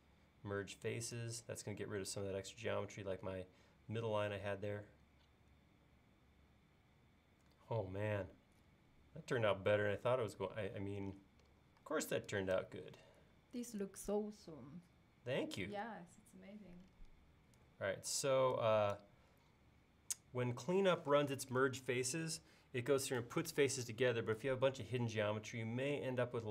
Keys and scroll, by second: 11.9 e.